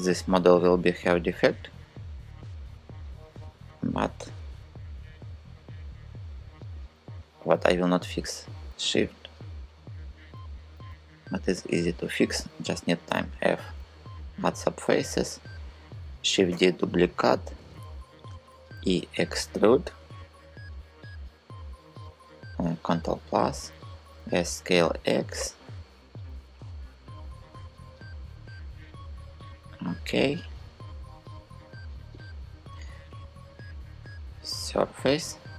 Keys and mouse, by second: 0.8 click, 2.1 click, 8.1 shift+click, 12.7 f, 15.9 shift+d, 16.2 Return, 18.1 e, 19.5 click, 22.7 ctrl+KP_Add, 23.7 s, 24.3 x, 31.8 click, 33.2 click.